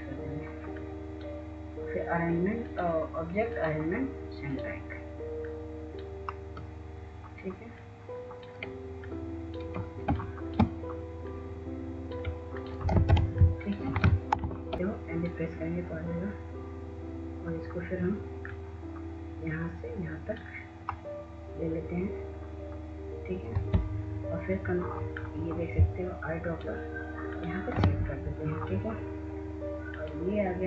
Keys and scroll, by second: 14.6 w.